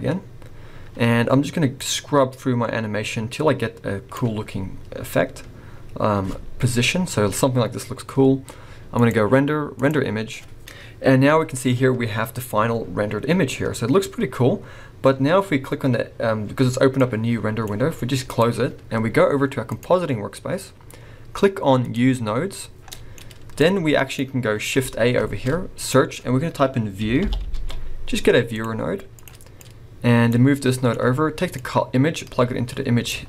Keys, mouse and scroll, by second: 0.1-1.8 scroll down 4, 1.8 click, 4.5 scroll up 2, 9.0 click.